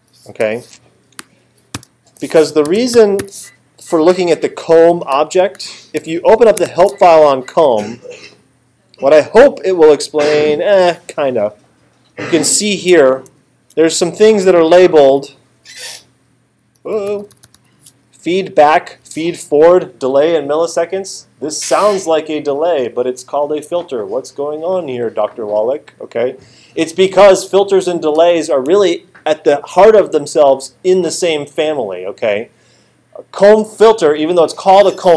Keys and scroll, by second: 0.4 BackSpace, 1.7-3.7 typing, 4.2 Down, 4.7 Return, 13.3 alt+super+8, 16.2 alt+super+=, 16.8 alt+super+-.